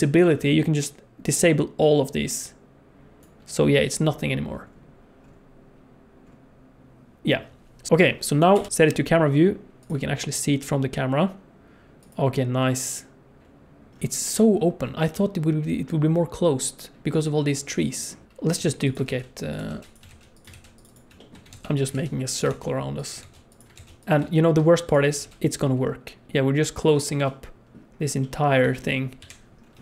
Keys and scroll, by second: 7.9 alt+a, 7.9 ctrl+s, 8.5 KP_0, 18.5-23.7 typing, 25.2 shift+d, 26.3 shift+d, 29.2 KP_7.